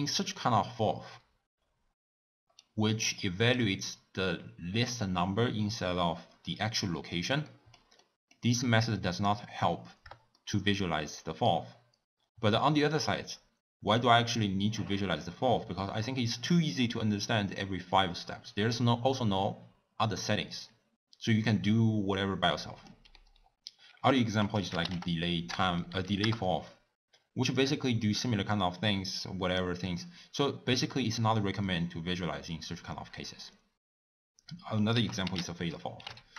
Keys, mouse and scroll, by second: 10.4-26.4 shift+middle drag, 26.4 Down.